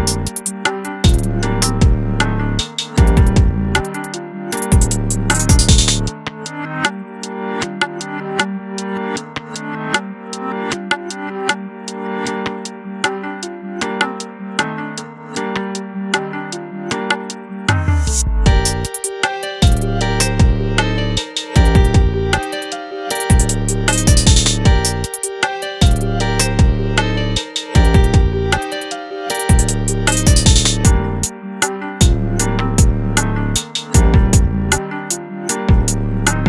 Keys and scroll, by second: 16.4 ctrl+g.